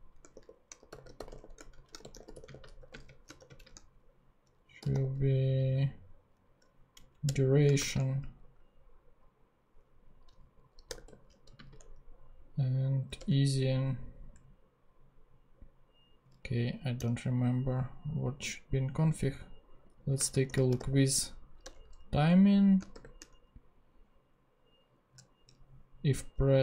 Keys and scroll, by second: 0.0-3.4 typing, 4.6-5.4 typing, 7.1 Down, 7.3 Return, 7.7 shift+;, 7.7 shift+space, 10.9 0, 11.5 ,, 11.5 space, 13.3 Return, 16.9 super+/, 20.2-21.2 typing, 21.8 Return, 22.9 shift+9.